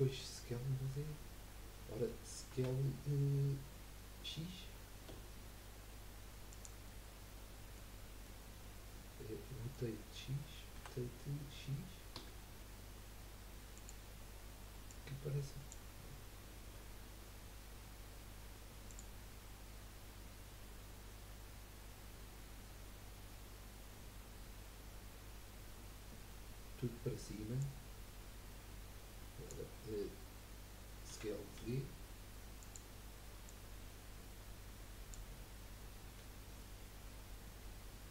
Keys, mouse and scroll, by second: 0.0-2.6 middle drag, 2.6 s, 6.9-7.9 middle drag, 7.9-8.3 scroll up 2, 8.3-10.8 middle drag, 10.8 r, 14.9 click, 16.6 KP_1, 27.6 click, 31.6 s, 33.5 click, 36.0 KP_3.